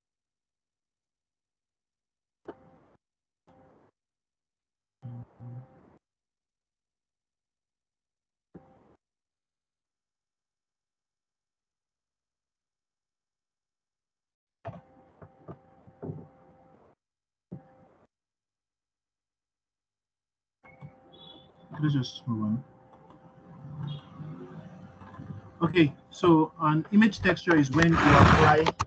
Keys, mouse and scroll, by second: 28.1-28.8 scroll down 2.